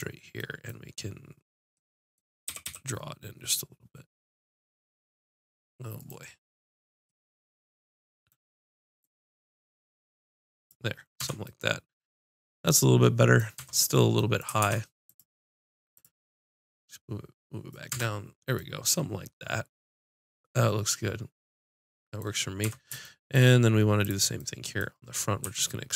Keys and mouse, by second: 2.5 g, 9.0-10.9 drag, 11.2 Tab, 13.6 Tab, 14.6 ctrl+Tab, 15.9-16.9 drag, 17.9 Tab, 22.6 Tab, 24.0 click, 25.4 e.